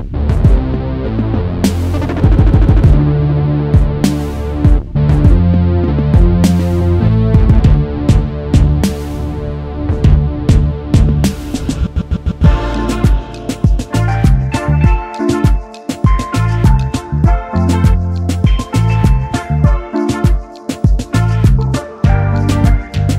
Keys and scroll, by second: 17.3 Return, 20.1 space.